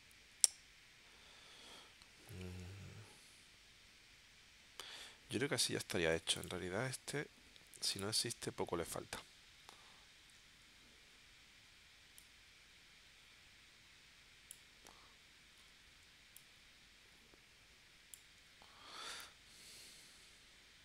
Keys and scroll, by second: 6.1 v, 10.2 shift+w.